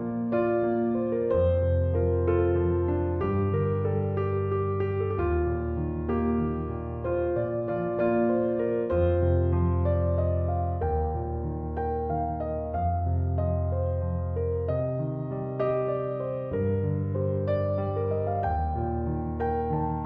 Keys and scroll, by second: 3.7 Return, 12.7 0, 12.9 Return, 18.3 9, 18.5 0, 18.7 Return.